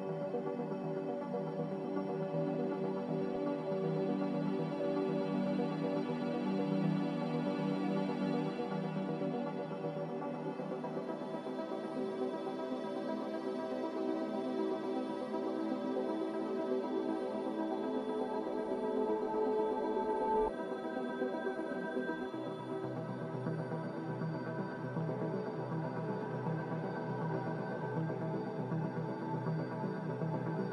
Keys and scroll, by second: 2.3 Delete, 9.1 g, 16.0 z, 22.7 z, 25.9 ctrl+z, 30.0 Return.